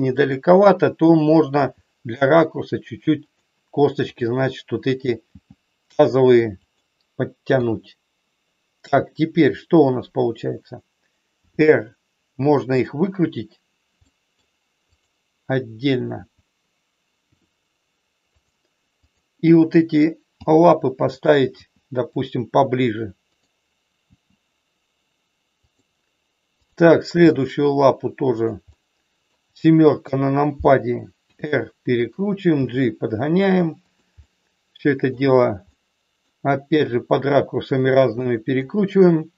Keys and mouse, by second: 0.1 click, 1.6 g, 4.0 click, 5.3 g, 6.6 click, 7.5 KP_1, 11.4 r, 14.0 middle click, 14.9 click, 16.1 KP_1, 17.3 r, 19.0 click, 20.3 g, 21.6 g, 22.1 click, 23.3 click, 26.5 click, 27.1 g, 28.3 click, 28.8 middle click, 30.0 KP_7, 31.3 r, 31.9 click, 32.6 g, 34.1 middle click, 35.8 middle click, 36.9 r, 38.1 middle click.